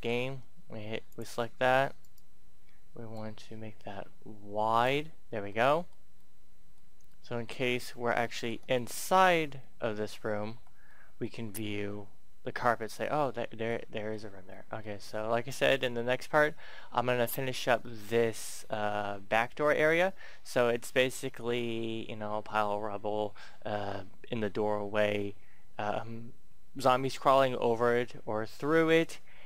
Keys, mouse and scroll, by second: 0.0-0.2 typing, 0.9 click, 1.5 Tab, 1.9 right click, 3.1-4.9 drag, 4.9 Tab, 5.4-7.0 middle drag, 7.6 scroll up 1, 8.2 shift+middle click, 9.4 Tab, 10.5 Tab, 10.8-15.7 middle drag, 19.4 scroll down 1, 19.8 middle click, 23.6 middle click.